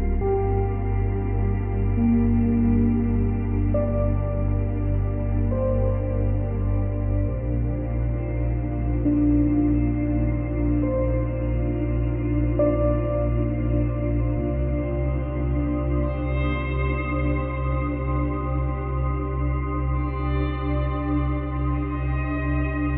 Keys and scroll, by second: 7.0 space, 14.5 space, 15.4 space, 19.2 space, 20.0 space.